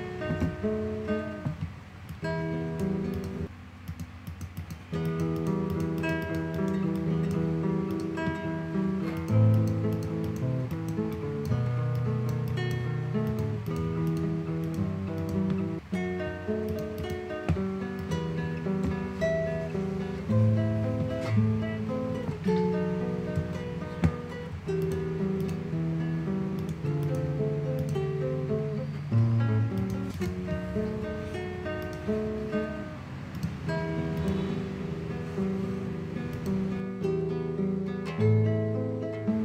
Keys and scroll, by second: 23.7 ].